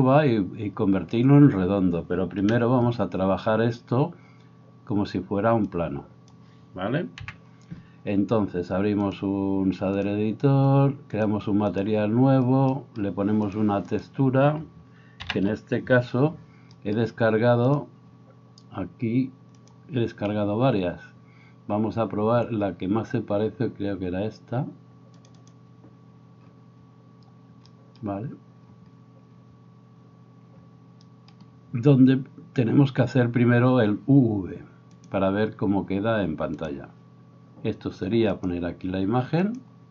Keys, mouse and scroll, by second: 2.4 KP_1, 7.2 n, 8.6-11.1 drag, 11.1 middle click, 11.3 right click, 11.7-13.6 middle drag, 13.6 right drag, 13.9 middle click, 14.1-22.3 right drag, 15.3 ctrl+t, 17.7-25.5 drag, 25.5-29.3 right drag, 29.3-39.9 drag, 35.1-39.9 right drag.